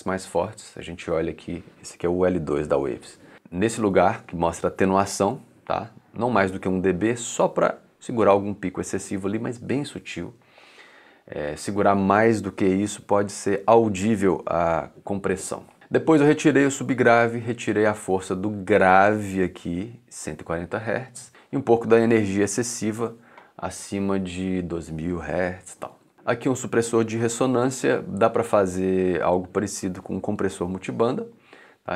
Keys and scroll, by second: 15.9 2, 25.5 2.